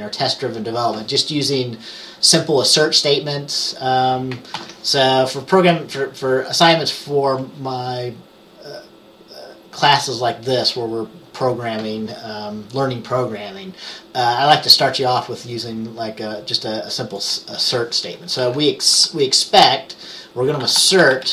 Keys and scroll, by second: 4.7 ctrl+s, 18.9-21.3 typing.